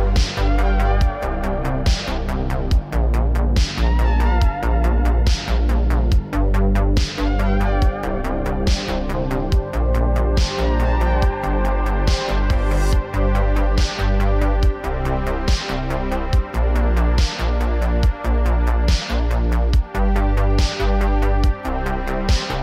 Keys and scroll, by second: 4.8 space, 8.9 a, 9.1 space, 11.6 h, 12.2 a, 13.4 a.